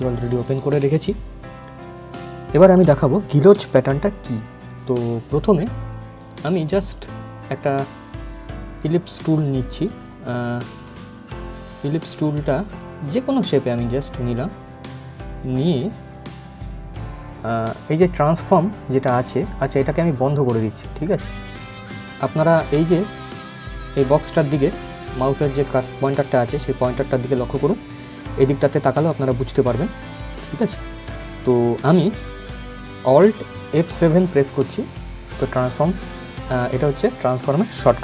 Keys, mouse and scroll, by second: 4.3 click, 8.9-14.6 drag, 18.1 click, 22.8 click, 26.0 click, 29.0 click, 32.9 alt+Num_Lock, 32.9 click, 33.4 alt+F7.